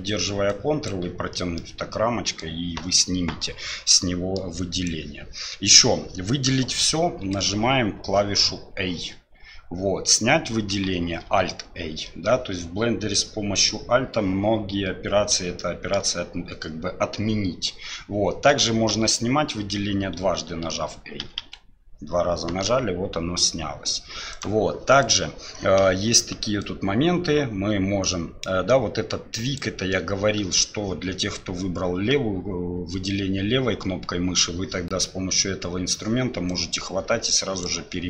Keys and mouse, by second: 0.6 ctrl+click, 1.6-2.4 middle drag, 3.9 middle click, 4.7 click, 7.5 a, 11.3 alt+a, 15.6-16.0 shift+middle drag, 18.9 a, 21.2 a, 21.4 a, 24.3-25.1 drag, 26.6-29.6 drag, 36.5-37.6 drag.